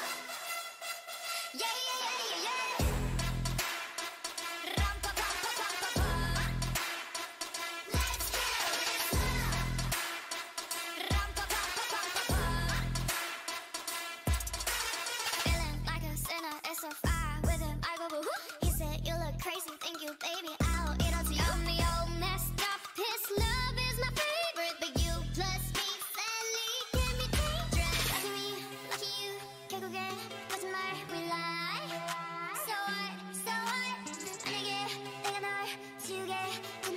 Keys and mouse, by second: 0.0-3.9 drag, 0.8 z, 2.9 ctrl+c, 3.1 ctrl+c, 4.3-5.9 drag, 5.6 Tab, 8.6 ctrl+v, 15.9-21.6 drag, 23.4-26.9 drag, 27.8 Tab, 28.4 ctrl+a, 29.0 ctrl+a, 30.9 ctrl+a, 31.3 ctrl+a, 33.1-36.9 drag.